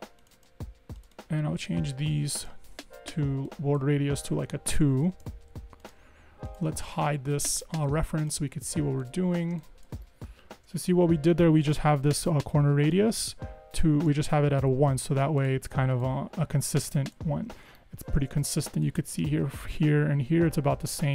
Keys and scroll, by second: 4.6 2, 4.8 Tab, 5.1 Escape, 5.3 Escape, 5.7 Escape, 10.6 super+-, 18.2 super+=, 18.2 super+=.